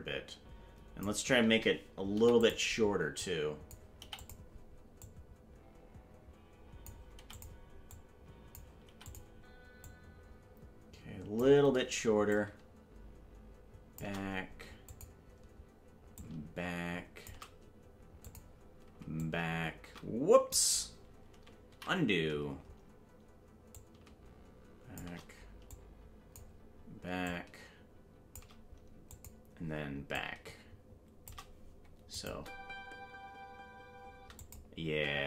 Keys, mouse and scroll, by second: 2.1 i, 3.2 click, 4.0 i, 5.0-6.9 drag, 7.1 i, 7.9 click, 8.9 i, 9.8-11.4 drag, 12.3-14.0 drag, 14.9 click, 16.1-17.3 drag, 18.2 click, 19.2-20.5 shift+drag, 22.3 ctrl+z, 23.7-25.0 drag, 25.7 click, 27.2-28.4 drag, 29.1 click, 30.1-31.3 drag, 32.1-34.5 drag, 32.3 space, 34.4 space, 34.8 space.